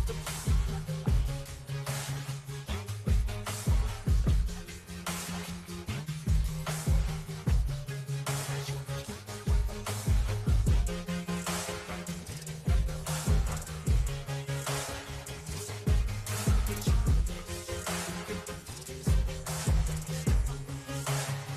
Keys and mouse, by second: 0.0 Down, 0.8 shift+Right, 1.8 Down, 2.2 Down, 2.4 Down, 7.0 Return, 8.5 Return, 9.1 Left, 11.4 click, 12.0 click, 14.5 click, 14.7 click, 17.0 click, 18.2 click, 19.3 click, 20.1 click.